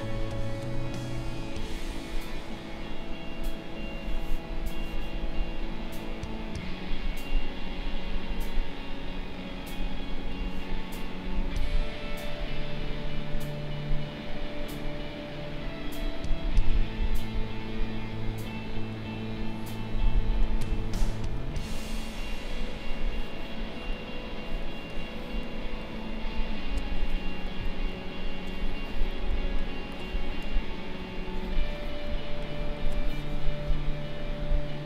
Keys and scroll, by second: 20.4 space, 30.9 ctrl+=.